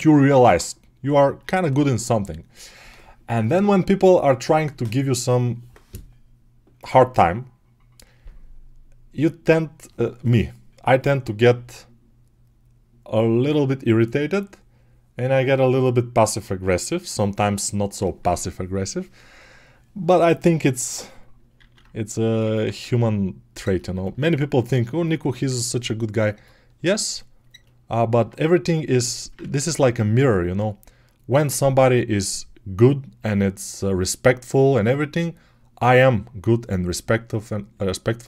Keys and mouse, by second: 21.4 alt+q, 29.3 ctrl+z, 31.5-38.2 drag.